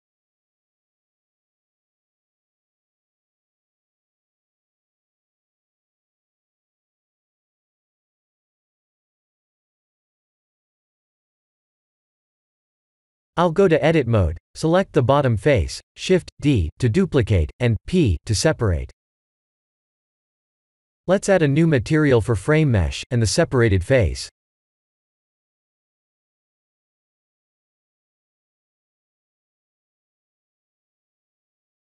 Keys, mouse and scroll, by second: 0.2-1.2 drag, 1.7 click, 2.8-3.9 drag, 4.5 click, 5.4 click, 7.3 Tab, 7.8-8.1 middle drag, 8.9-10.7 middle drag, 11.6-12.9 middle drag, 12.9 Tab, 12.9 drag, 12.9 x, 12.9 3, 13.6 Tab, 13.9 3, 14.1 click, 15.2 shift+d, 15.3 KP_Enter, 16.2 p, 18.7 Tab, 20.2 g, 21.7 z, 22.2 click, 22.7 scroll up 1, 22.9-23.6 middle drag, 24.9 scroll up 1, 25.0-25.6 middle drag, 25.6 scroll down 1, 26.2 Tab, 26.8 Tab, 27.2 click, 29.4 click.